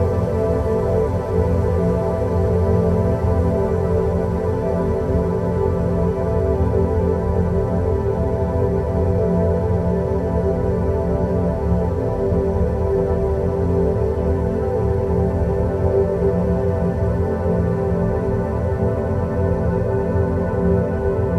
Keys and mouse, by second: 1.8 click, 3.6 click, 4.7 shift+a, 6.9 g, 10.1 g, 12.4 s, 14.2 middle click, 20.3 g.